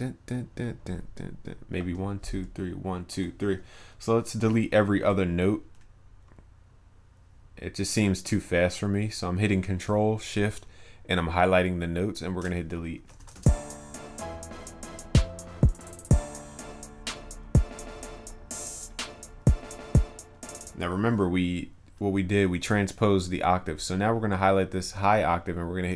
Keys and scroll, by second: 13.3 ctrl+s.